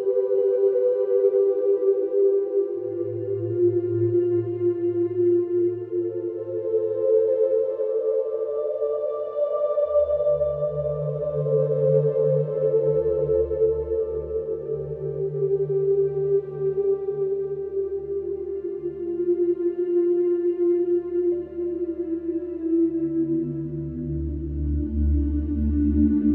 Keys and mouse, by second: 3.2 p, 3.4 a, 3.6 t, 3.7 i, 3.9 Return, 8.4 middle click, 9.7 right click, 15.0 shift+middle click, 20.8-21.6 middle drag, 22.8 ctrl+l, 24.2 middle click, 24.5 middle drag.